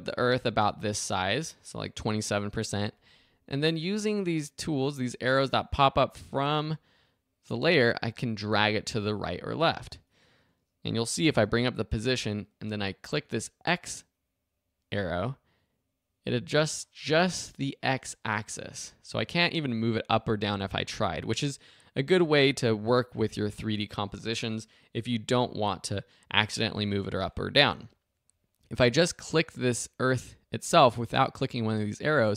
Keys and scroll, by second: 11.3 p, 27.7 super+z.